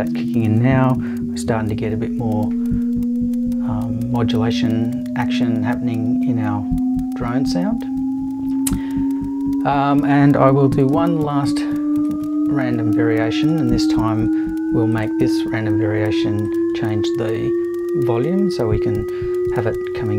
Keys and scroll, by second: 10.9 super+v.